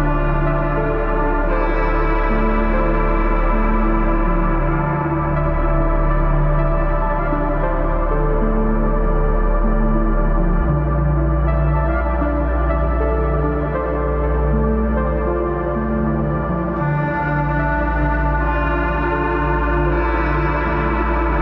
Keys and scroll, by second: 2.7 space, 3.1 space, 4.6 space, 15.2 typing, 18.5 space, 20.1 space.